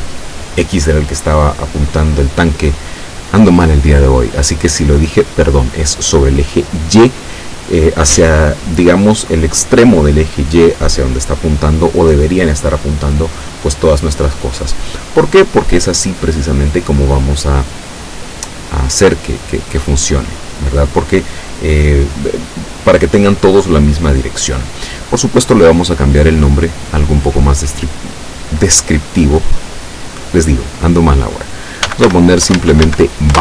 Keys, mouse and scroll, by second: 26.5 click, 27.0 click, 27.8 click, 31.7-33.4 typing.